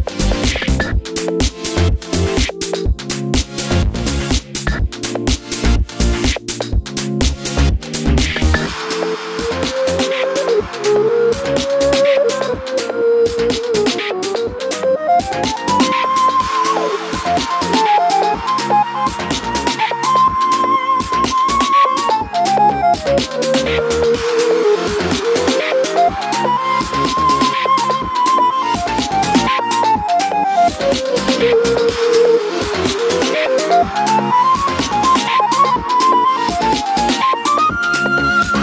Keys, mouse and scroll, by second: 0.0 click, 2.1 shift+click, 2.5-4.8 middle drag, 3.3 KP_3, 4.3 g, 4.8 click, 4.9-6.8 middle drag, 5.9 g, 6.8 click, 8.3 click, 8.4-9.6 middle drag, 9.6 click, 9.6 middle click, 9.8 2, 10.0 click, 10.1 middle click, 10.5 g, 10.9 click, 11.9 scroll down 1, 12.1 middle click, 12.4 Tab, 12.5 middle click, 14.4-17.3 shift+middle drag, 14.6-16.7 scroll up 1, 17.0 Tab, 17.3 click, 17.6 Tab, 18.2 KP_7, 18.5 z, 18.8 click, 19.5 3, 19.6 click, 19.8 shift+click, 20.2-20.6 scroll down 1, 20.6 shift+click, 24.5-25.8 middle drag, 25.2 scroll up 1, 25.5 z, 25.8 click, 26.1 Tab, 26.6 KP_Divide, 26.9-27.2 scroll up 1, 27.2 Tab, 27.6 shift+click, 28.6 shift+click, 28.9-30.1 middle drag, 29.3 shift+d, 29.7 Return, 29.9 Tab, 30.3 click, 30.7 click, 31.3 click, 31.4 Tab, 31.8 middle click, 32.4 x, 32.7 click, 32.9-37.4 middle drag, 33.2 KP_7, 33.7 z, 34.3-34.9 scroll down 1, 34.9 KP_Divide, 35.8 KP_7, 36.6 scroll up 1, 37.0-37.4 scroll down 1, 37.5 2, 37.5 click, 37.8 g.